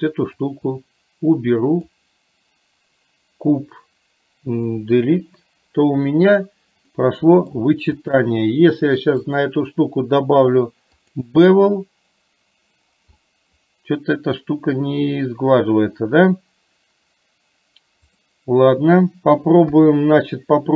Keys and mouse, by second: 0.6-1.9 drag, 4.9 Delete, 7.0 middle click, 8.1 click, 9.4-11.4 drag, 13.2-14.4 middle drag, 18.2 click, 19.7 KP_3.